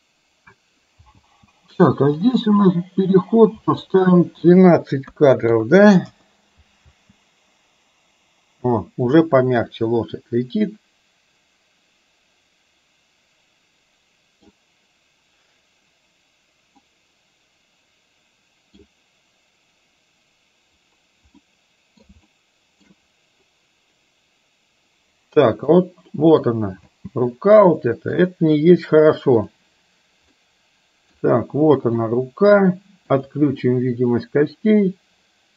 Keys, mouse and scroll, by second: 1.3 space, 2.3 click, 4.6-6.1 drag, 6.9 space, 10.3-14.5 middle drag, 16.9-18.9 middle drag, 21.5 middle click, 22.3-22.9 shift+middle drag, 25.8-26.4 middle drag, 26.9 space, 27.8-28.3 shift+middle drag, 29.4 click, 30.5 middle click, 32.0 click, 33.3 drag, 33.8-35.5 middle drag.